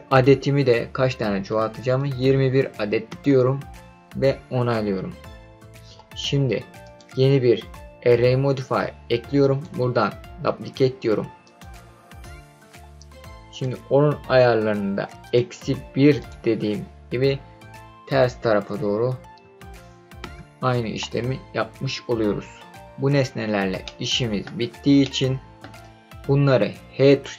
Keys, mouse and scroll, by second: 0.1-3.1 drag, 6.8 click, 9.4-12.2 drag, 13.5 click, 15.2-20.9 drag, 23.1-23.8 scroll down 5, 23.8-24.4 middle drag, 24.5-25.0 scroll down 2, 25.0 middle click.